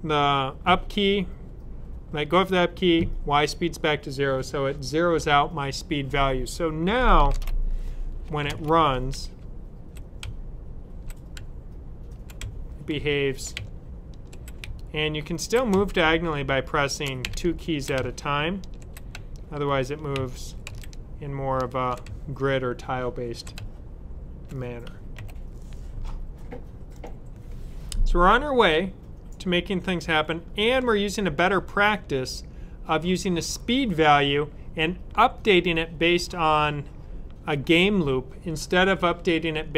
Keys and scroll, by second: 7.2 super+s, 10.1 super+Up, 11.3 Right, 12.3 Down, 12.8 Left, 13.5 Up, 14.5 typing, 15.6-17.8 typing, 19.0-20.5 typing, 21.9 typing, 23.5 typing, 24.8-25.6 typing.